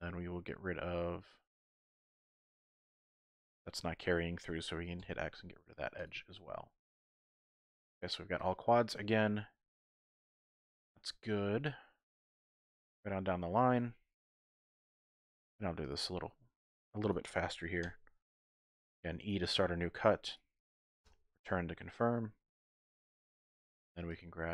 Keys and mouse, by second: 0.1-1.7 middle drag, 2.6-4.3 middle drag, 3.5 typing, 5.0 x, 6.4-7.4 middle drag, 7.9 typing, 8.8-10.0 middle drag, 11.0 shift+click, 11.7 click, 13.6 click, 14.9 k, 21.8 click, 23.3-24.0 typing, 23.4 alt+click, 24.2 alt+click.